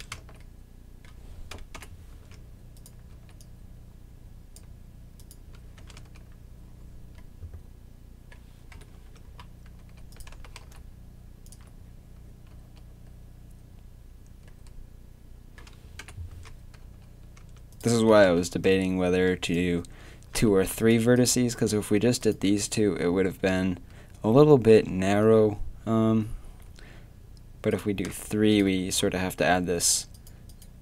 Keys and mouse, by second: 0.0 Tab, 0.1 z, 1.8 KP_7, 2.1 Tab, 3.1 z, 5.8 Tab, 5.8 z, 6.0 z, 8.7 KP_3, 8.9 Tab, 9.8 z, 10.3 g, 12.3 a, 12.5 z, 16.0 KP_7, 16.3 Tab, 16.8 z, 17.4 Tab, 18.1 g, 20.3 a, 21.6-24.3 drag, 27.7-30.8 drag, 29.3 a.